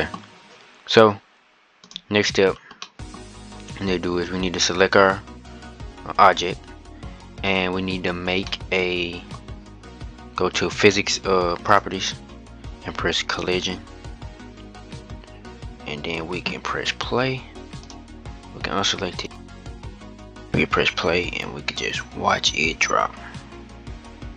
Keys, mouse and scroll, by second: 1.6-2.2 drag, 2.2-2.6 scroll down 4, 2.6-4.6 middle drag, 4.6 scroll up 3, 8.2 middle click, 9.1-9.6 scroll up 2, 12.1 click, 13.3-16.1 drag, 17.7 click, 19.0 click.